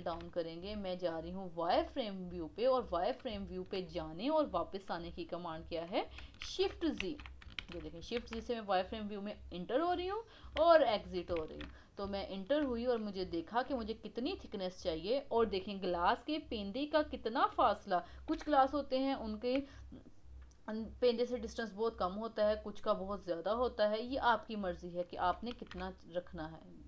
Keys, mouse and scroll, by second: 1.2 click, 1.6 click, 6.4 shift+z, 7.0 shift+z, 11.8-12.2 scroll up 3, 12.2-13.6 shift+middle drag, 13.6 s, 25.6 shift+z, 25.8 scroll down 4.